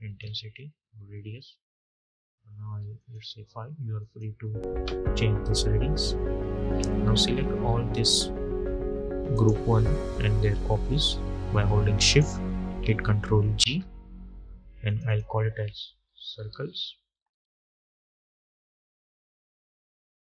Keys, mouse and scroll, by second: 6.0-6.9 scroll up 1, 9.2 click, 9.5-10.0 scroll up 1, 11.9 shift+click, 13.4 ctrl+g, 14.7 click, 15.7-17.5 typing, 19.3 typing.